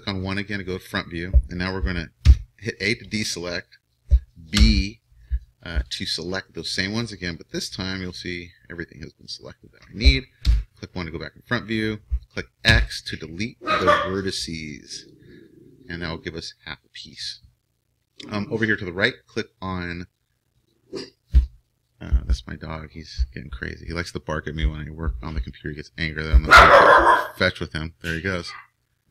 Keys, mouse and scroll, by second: 2.2 a, 4.6 b, 8.4-10.4 middle drag, 10.4 KP_1, 12.7 x.